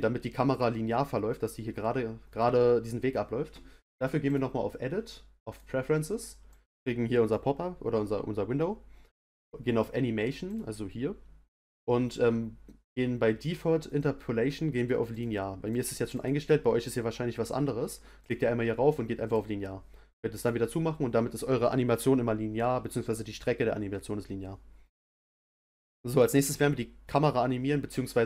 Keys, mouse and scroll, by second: 4.2-7.3 drag.